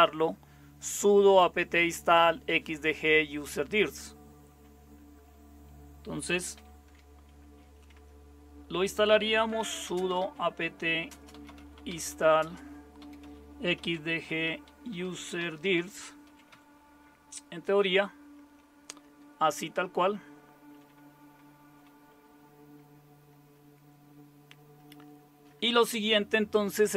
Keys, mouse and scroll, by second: 6.5 typing, 9.2-17.0 typing, 22.8-23.8 BackSpace.